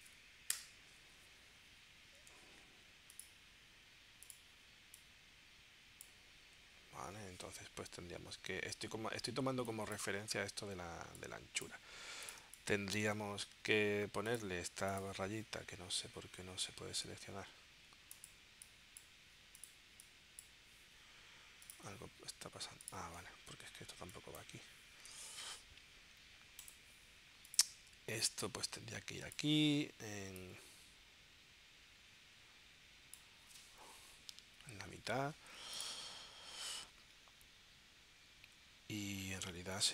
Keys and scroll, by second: 0.5 Return, 2.3 v, 12.4 space, 34.1 Left.